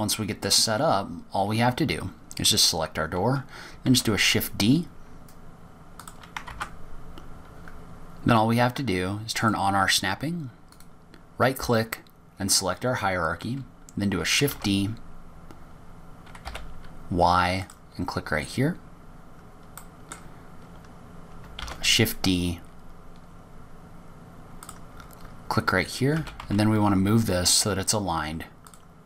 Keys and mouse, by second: 0.1 middle click, 1.4 click, 3.7 click, 5.3 shift+d, 7.9 ctrl+z, 10.8 click, 12.1-14.0 drag, 15.9 shift+d, 21.2 click, 23.4 shift+d, 27.5 g.